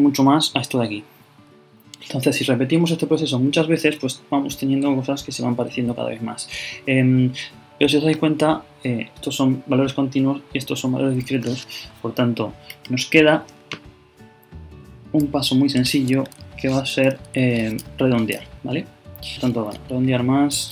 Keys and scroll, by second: 19.7 shift+Delete, 20.1 shift+8.